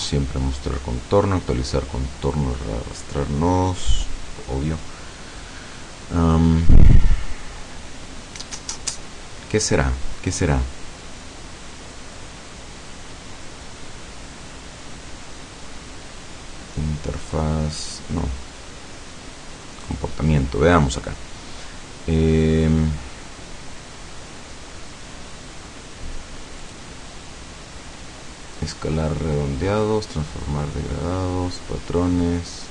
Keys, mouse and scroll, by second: 13.1 scroll down 2, 13.9-14.5 scroll down 4, 19.9 click, 20.4-20.7 scroll down 2, 26.7 click.